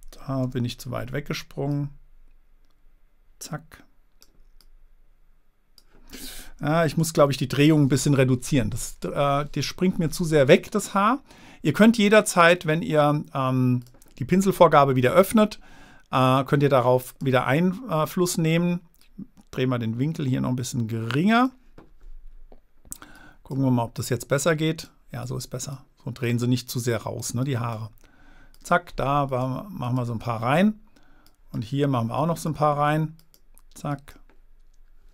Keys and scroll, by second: 0.8 super+z, 7.4 super+z.